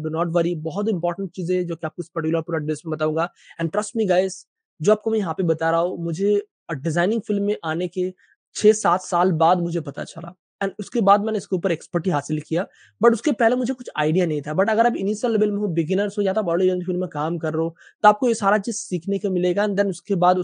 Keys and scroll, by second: 3.6 Page_Up.